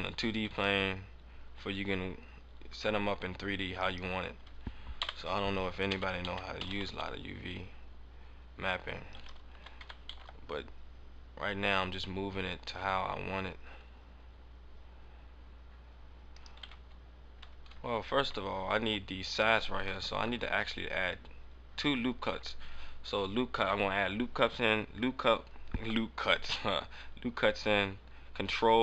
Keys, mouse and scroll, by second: 0.2 g, 3.8 right click, 4.9 KP_7, 5.9 a, 6.1 a, 6.6 s, 9.1 click, 9.4 click, 10.4 g, 16.4 right click, 16.6 Tab, 16.9-17.2 scroll down 3, 17.4 Tab, 17.4 scroll up 3, 20.1 ctrl+r.